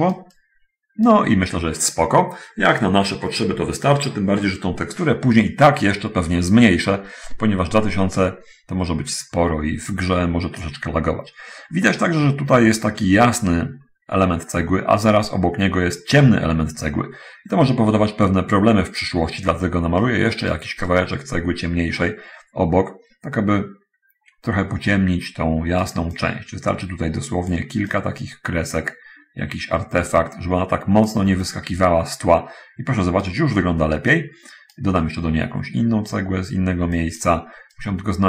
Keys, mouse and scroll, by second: 0.2-1.2 right drag, 5.9 middle click, 8.5 middle click, 9.4-11.1 right drag, 11.5-12.1 scroll up 1, 12.1-12.4 scroll down 1, 12.4 middle click, 20.3 right click, 21.2-26.3 right drag, 26.5-27.9 drag, 30.1 click, 31.7 click, 32.1-33.7 right drag, 34.1-35.2 right drag, 37.1 click, 37.1 right click, 38.0-38.2 right drag.